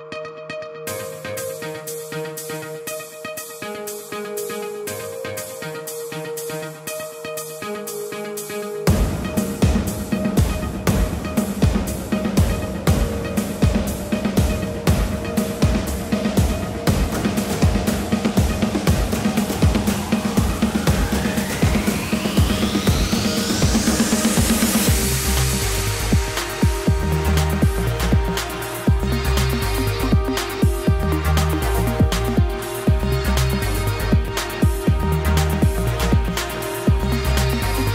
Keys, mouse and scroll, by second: 0.4-1.0 scroll down 9, 1.0 shift+middle click, 1.3-1.7 scroll up 1, 1.7 y, 2.0 g, 3.8 3, 4.0 click, 4.5 g, 7.0 shift+middle click, 7.4-7.9 scroll up 2, 7.9 shift+middle click, 8.5-8.9 scroll up 2, 8.9 shift+middle click, 9.3 click, 10.5 k, 14.2 scroll down 2, 14.3-15.4 scroll up 5, 15.4 k.